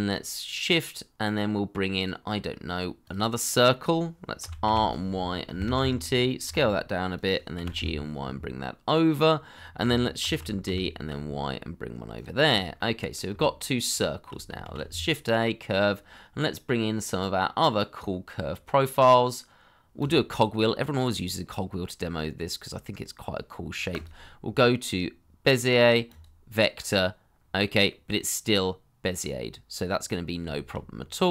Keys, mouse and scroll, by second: 4.6 r, 5.4 9, 5.7 Return, 6.4 s, 7.5 g, 7.7 y, 10.2 shift+d, 10.6 y, 12.4 double click, 12.7 middle click, 13.3 shift+middle click, 14.6 shift+a, 28.6 middle click, 29.8-30.4 scroll up 1, 30.5 shift+middle click, 30.9-31.2 scroll down 1, 31.2 middle click.